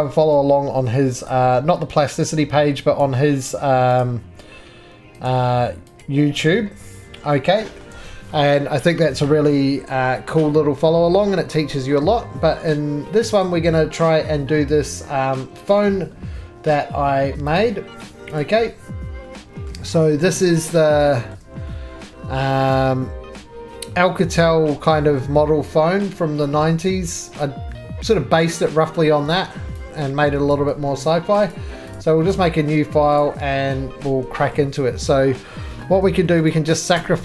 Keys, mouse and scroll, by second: 10.2 shift+middle click, 10.2-10.5 scroll, 11.9 middle click, 13.4 scroll, 13.5 click, 15.7 click, 34.2 click, 34.2-35.9 scroll, 36.5 click, 37.0 x.